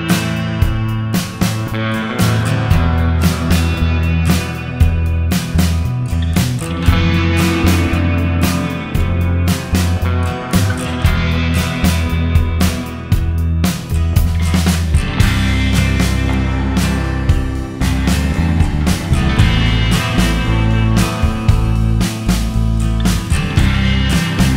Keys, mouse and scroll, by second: 3.3 middle click, 8.5 scroll up 3, 10.5 scroll up 1, 11.9 middle click, 14.2-14.8 scroll down 2, 14.8-15.3 scroll down 3, 17.0 middle click, 21.2-21.9 scroll up 1, 21.9-22.5 scroll up 2, 22.9-24.0 scroll up 3, 24.0 middle click, 24.0-24.5 scroll up 1.